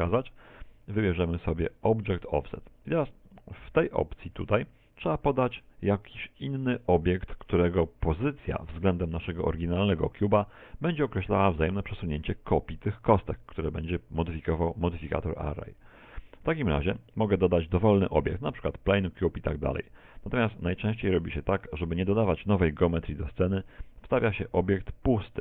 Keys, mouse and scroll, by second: 1.2 click, 15.8 click, 17.0 shift+a.